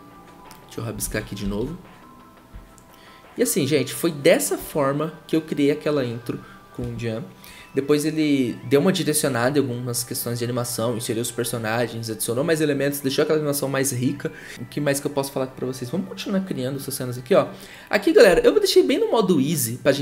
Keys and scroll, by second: 1.0 ctrl+z, 1.4 ctrl+z.